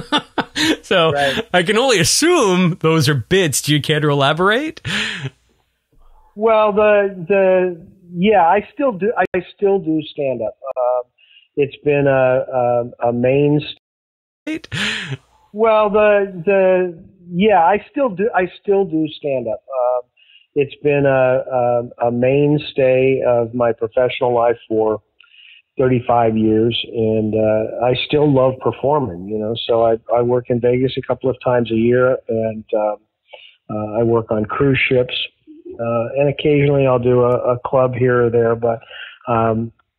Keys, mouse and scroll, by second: 1.6-2.9 drag, 7.6 click, 9.1 Delete, 9.8 click, 11.1 click, 12.7 click, 13.7 space, 14.2 click, 14.4 space, 15.1 click, 15.5 click, 16.4 click, 17.1 click, 17.9 click, 18.5 click, 19.2 click, 19.9 click, 20.4 click, 21.2 ctrl+s, 28.0 click, 28.7 click, 30.9 click, 32.3 click, 32.7 click, 34.0 ctrl+z, 34.5 click, 35.1 click.